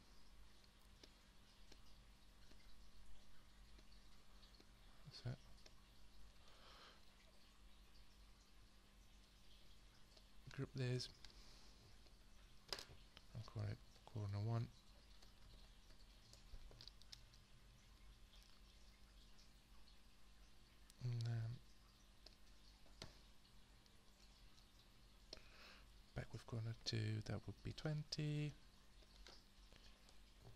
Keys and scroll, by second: 11.3 ctrl+alt+g, 13.5-16.6 typing, 23.0 h, 30.1 ctrl+d.